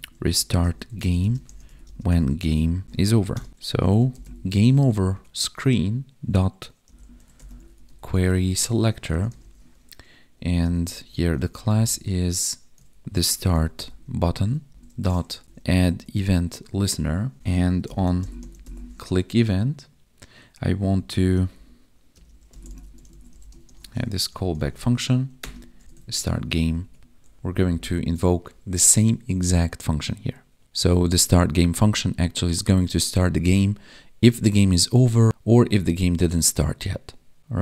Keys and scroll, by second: 0.5 space, 1.2 space, 1.8 space, 3.5 ctrl+Down, 5.1 Tab, 8.1 Tab, 14.7 Right, 16.3 Tab, 20.9 Right, 22.1 space, 24.2 Right, 26.7 Down, 26.8 Tab, 27.4 ctrl+Down, 27.5 ctrl+Up.